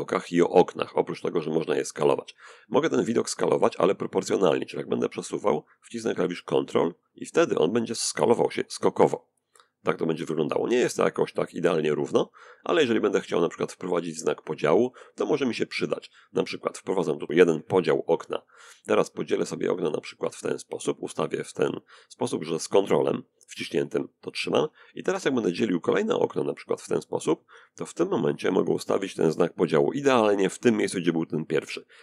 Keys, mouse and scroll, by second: 3.0-14.2 drag, 15.0-17.2 drag, 18.4-22.3 drag, 25.6-29.5 drag.